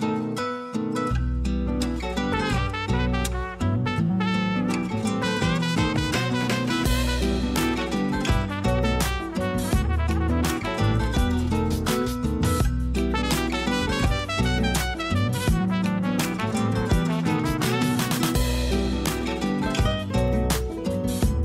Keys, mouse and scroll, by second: 0.0-0.3 scroll up 1, 0.3 s, 1.8 g, 3.2 s, 4.8-5.1 scroll down 3, 5.1 a, 5.3 a, 5.4 scroll down 1, 6.0 scroll up 1, 6.3 2, 6.5 click, 7.3 g, 12.0 a, 12.2 a, 13.0 scroll down 4, 13.1 Tab, 13.7-14.9 shift+middle drag, 14.9-15.3 scroll up 1, 15.3 a, 15.5 a, 15.8-16.1 scroll up 1, 16.1-17.9 shift+middle drag, 17.9 click, 18.2 scroll up 3, 18.5 Tab, 18.6 middle click, 19.2 3, 19.3 click, 19.7 scroll down 2, 20.0 shift+middle click, 20.6-21.4 scroll up 1.